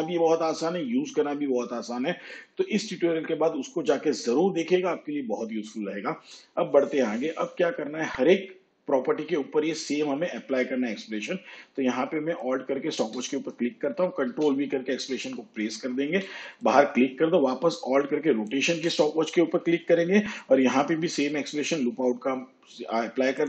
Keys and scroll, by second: 14.4 ctrl+v, 21.1 ctrl+v.